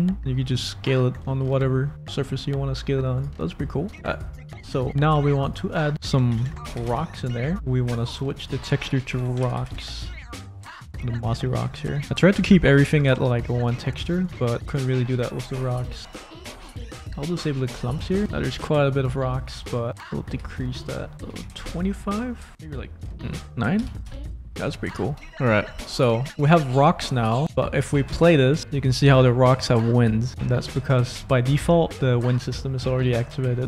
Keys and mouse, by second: 0.1 click, 0.5 s, 1.2 Tab, 1.4 click, 3.1 click, 3.3 middle click, 4.1 click, 4.7 middle click, 5.5 click, 5.9-7.5 drag, 8.4-10.7 drag, 11.4 click, 11.4 middle click, 14.2 click, 17.5 click, 18.2 click, 19.1 click, 19.9-21.6 drag, 21.1 BackSpace, 22.5-24.0 drag, 24.6 click, 26.6 middle click, 28.0 space, 30.7 space.